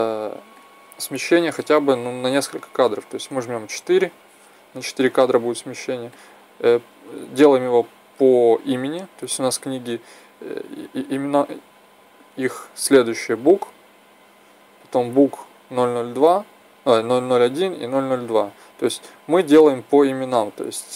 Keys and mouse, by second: 0.4 click, 6.3-12.7 drag, 13.0-18.1 drag, 20.2 b.